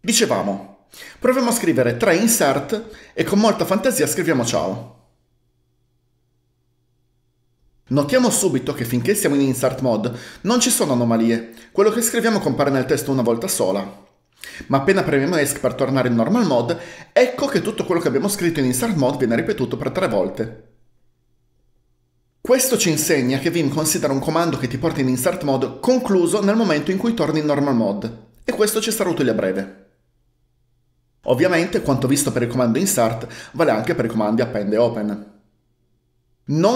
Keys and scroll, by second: 2.1-3.0 typing, 4.3-5.3 typing, 15.5 Escape.